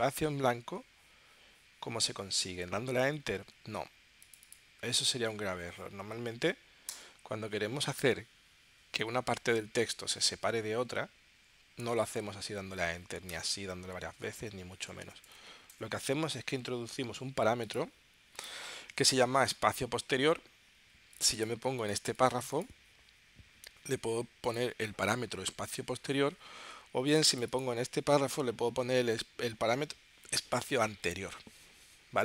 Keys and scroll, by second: 6.0 Right, 6.9 Return, 13.3 Return, 14.4 Return.